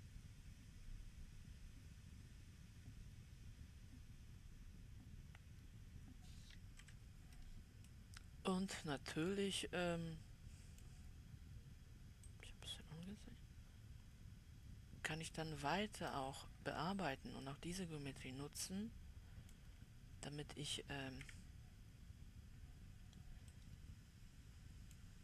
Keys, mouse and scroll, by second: 0.4-3.4 drag, 6.2 right click, 6.2 middle click, 6.6-7.3 scroll up 1, 7.3 w, 8.4-9.9 right drag, 8.4 middle click, 9.9-12.8 middle drag, 12.8-15.7 drag, 17.0-18.0 scroll down 2, 18.0-21.6 middle drag, 21.6 KP_Decimal, 23.0-23.9 scroll down 2, 23.9-25.2 middle drag.